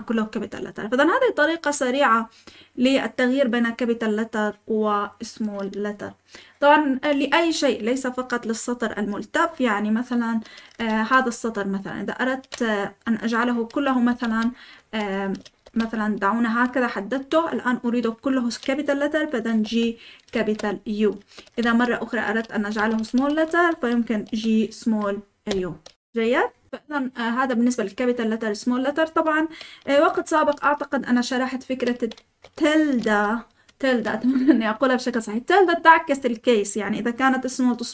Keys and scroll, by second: 8.6-11.2 typing, 14.0-17.0 typing, 14.7 Escape, 19.6-20.3 typing, 21.4-23.1 typing, 24.2 typing, 25.4 typing, 30.1-32.3 typing.